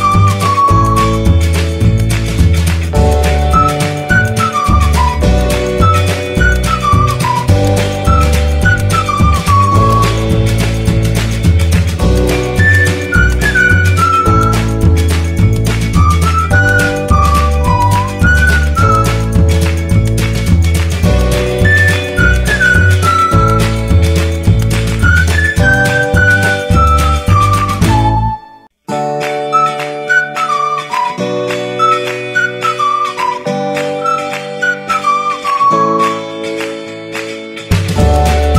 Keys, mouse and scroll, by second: 17.2-30.0 drag, 30.3 right click.